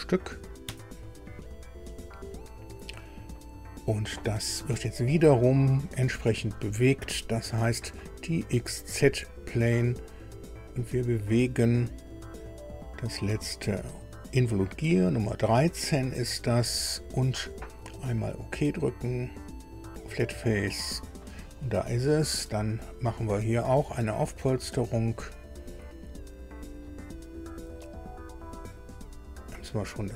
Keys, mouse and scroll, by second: 0.6 KP_Enter, 4.1-4.5 scroll down 2, 5.9 click, 6.5 scroll down 2, 8.7 click, 10.7 click, 12.1 click, 12.6-13.3 scroll down 4, 13.7 scroll down 2, 16.1 click, 19.1 click, 20.8 click, 24.7 click, 29.4 click.